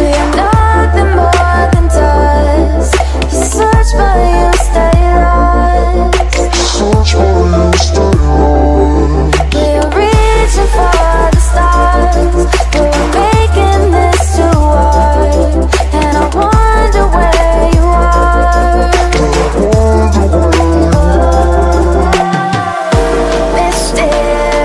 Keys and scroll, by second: 0.1 x, 1.9 space, 2.5 space, 3.0 ctrl+space, 3.2 ctrl+space, 3.5 z, 5.5 x, 8.6 space, 10.1 space, 10.5 space, 11.5 ctrl+space, 11.8 ctrl+space, 12.6 space, 13.7 ctrl+z, 14.4 ctrl+space, 15.9 ctrl+z, 16.7 z, 18.2 space, 19.5 ctrl+z, 20.5 ctrl+0, 21.5 ctrl+space, 21.7 ctrl+space, 23.2 ctrl+0.